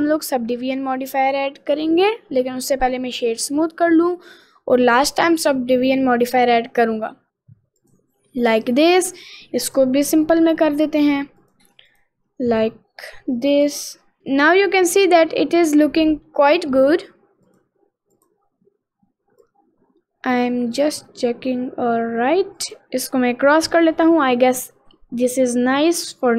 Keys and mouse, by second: 0.8-2.3 middle drag, 2.5 middle click, 3.0 middle click, 3.7 middle click, 5.1 click, 5.9-8.0 drag, 8.4 middle click, 9.9 click, 11.4 click, 11.9 click, 13.6 click, 14.3-16.3 middle drag, 18.1 click, 19.5-20.8 drag, 22.6 click, 23.7 middle click, 24.3-25.4 middle drag, 25.7-26.3 middle drag.